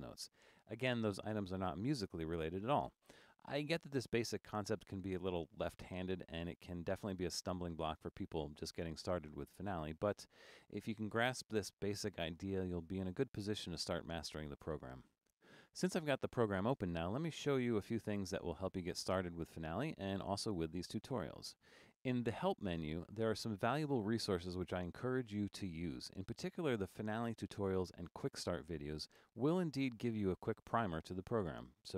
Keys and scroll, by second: 0.0-1.1 typing.